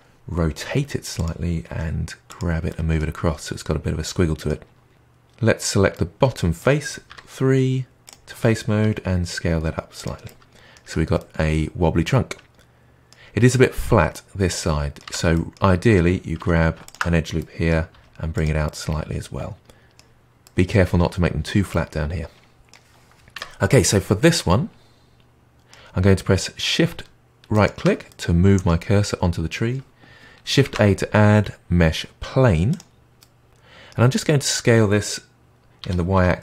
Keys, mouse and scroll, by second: 0.5 r, 1.6 g, 2.6-5.1 middle drag, 5.9-7.0 middle drag, 7.0 3, 8.0 click, 8.8 s, 10.2 middle click, 10.8 Tab, 11.1-15.0 middle drag, 15.0 Tab, 15.3-16.3 middle drag, 16.3 2, 16.8 alt+click, 17.3 middle click, 17.9 g, 18.6-23.3 middle drag, 23.3 Tab, 23.8-26.9 middle drag, 27.5-28.0 shift+right drag, 28.0-30.6 middle drag, 30.6 shift+a, 33.1-34.1 middle drag, 34.1-35.7 scroll up 4, 35.7 s.